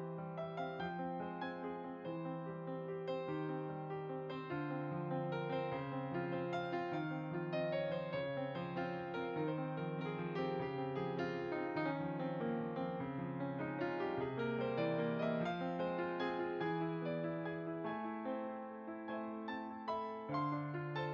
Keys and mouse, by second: 2.6 click, 3.2 s, 3.9 click, 5.5 g, 6.2 click, 7.2 x, 8.1 middle click, 9.1 s, 9.5 y, 10.4 click, 12.5 click, 15.1 click, 18.5 click.